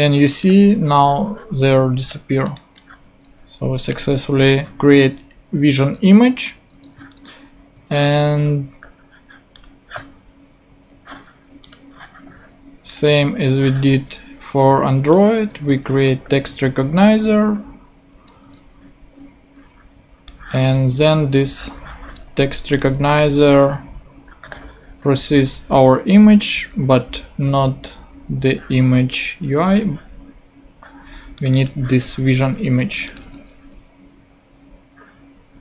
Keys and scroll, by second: 3.0 Tab, 3.9 Return, 5.8 super+Tab, 15.3 super+c, 15.6 super+Tab, 16.5 super+v, 18.4 super+Tab, 21.2 super+c, 21.3 super+Tab, 22.4 shift+super+Tab, 22.7 shift+Return, 23.2 shift+super+v, 23.9 super+v, 33.2 super+v.